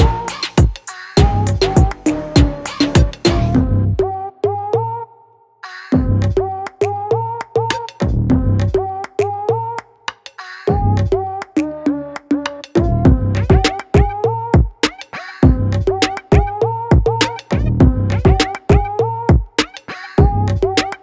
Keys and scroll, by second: 2.2 [, 2.3 [, 2.4 [, 2.8 ], 4.7 ctrl+z, 4.9 ctrl+z, 9.1 z, 10.1 b, 17.4 z, 18.5 v, 20.3-21.0 typing.